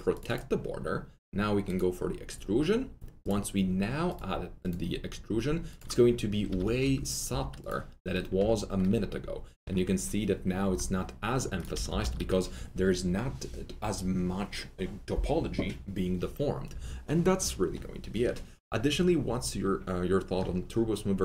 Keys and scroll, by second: 6.4 F3, 6.6 F3, 6.7 F4, 7.2 F4, 11.7 F3, 11.8 F3, 11.9 F4.